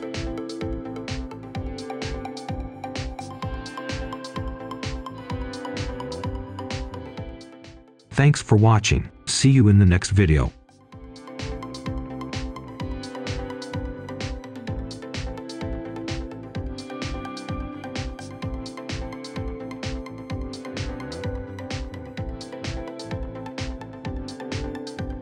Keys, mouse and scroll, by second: 0.3 shift+right click, 0.7 scroll down 1, 1.2 shift+right click, 1.7 shift+right click, 2.1-3.1 scroll up 1, 3.2 shift+right click, 3.5 shift+right click, 4.1-4.9 scroll down 1, 4.9 right click, 5.6 scroll down 1, 5.9 right click, 6.6-7.0 scroll down 1, 7.0 scroll up 1, 7.2 right click, 8.1-9.1 scroll up 1, 9.1 right click, 9.7-10.1 scroll down 1, 10.1 right click.